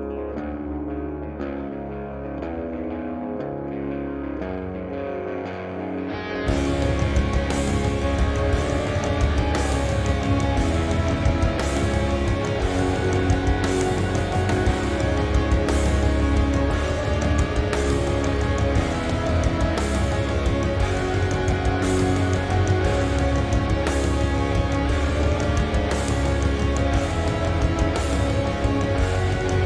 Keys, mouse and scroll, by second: 0.3-0.7 scroll up 2, 0.7 middle click, 1.0 scroll down 1, 1.2 x, 2.5 middle click, 2.7 z, 3.0 scroll up 1, 3.3 middle click, 3.5-4.1 scroll down 2, 4.3 middle click, 5.1-5.5 scroll up 1, 5.7 scroll down 1, 6.0 shift+middle click, 6.2-6.8 scroll up 1, 7.0 middle click, 7.0 z, 7.5 click, 8.2 shift+click, 8.6-10.1 shift+middle drag, 10.1 shift+click, 11.2 shift+middle click, 11.7 shift+click, 12.2 shift+drag, 13.5 x, 14.3-19.2 middle drag, 14.9-15.4 scroll up 2, 15.4 scroll down 2, 16.5-17.0 scroll down 1, 17.0 Tab, 17.7 z, 18.3-18.6 scroll down 1, 19.2 click, 19.5-22.7 drag, 22.1 scroll up 1, 22.3-22.7 scroll down 1, 22.7-23.7 middle drag, 23.4 `, 23.7 scroll up 1, 24.2 Tab, 24.4 middle click, 24.4 scroll up 2, 24.6 z, 25.9 click, 26.4-27.5 drag, 28.2 drag.